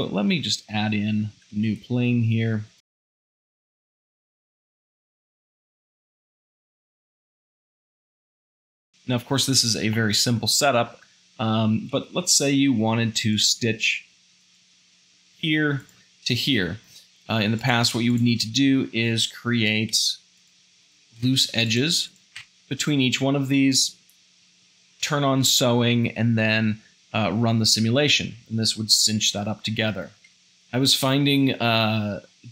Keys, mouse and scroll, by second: 1.2 Tab, 1.6 ctrl+r, 3.2 shift+middle click, 3.3 a, 3.4 Tab, 3.9 shift+middle click, 4.0 Tab, 4.5 s, 4.9 Tab, 5.1 Tab, 5.1 z, 6.9 x, 8.8 Tab, 8.9 shift+middle drag, 10.0-11.0 shift+middle drag, 11.0 Tab, 12.1 2, 13.4 alt+click, 14.4-16.4 alt+drag, 16.9 1, 18.1-20.0 shift+drag, 19.9 f, 20.9 shift+click, 21.2 f, 22.1 shift+click, 22.4 f, 30.1 ctrl+z, 30.3 ctrl+z.